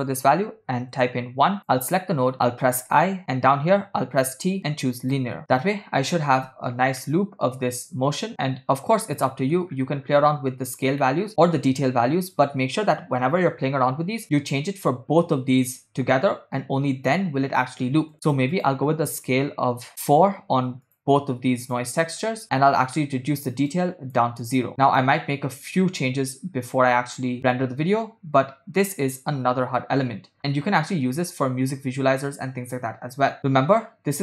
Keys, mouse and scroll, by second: 1.6 click, 3.0 i, 4.2 t, 5.6 click, 5.6 space, 7.2 shift+middle click, 8.6-9.4 scroll down 5, 9.4 middle click, 9.8-10.4 scroll up 3, 11.2 middle click, 18.1 click, 18.5-21.7 drag, 22.0 click, 23.7 click, 24.8 click, 25.0-25.4 scroll down 4, 25.6-26.0 scroll up 3, 26.4 scroll down 1, 31.1 space, 31.7 space, 33.5 space, 33.6-34.2 scroll down 7.